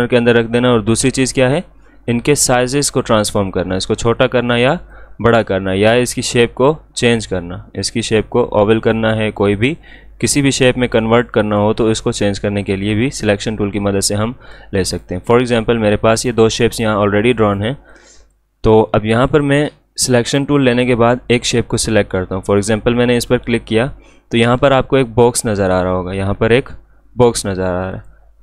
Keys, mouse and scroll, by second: 16.5 shift+click, 27.9 click.